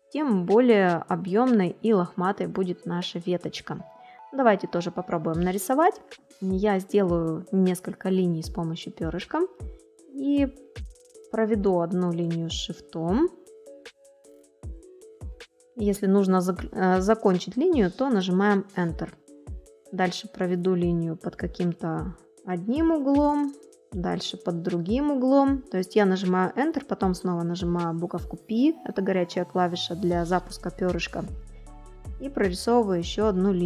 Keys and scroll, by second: 0.6 space, 11.3 ctrl+shift+a.